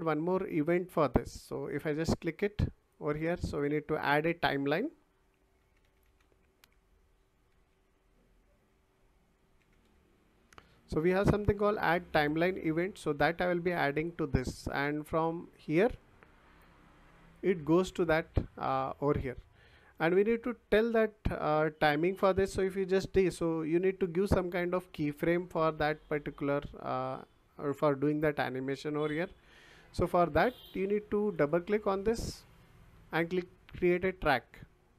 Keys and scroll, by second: 5.3-7.5 typing, 9.3-10.3 typing.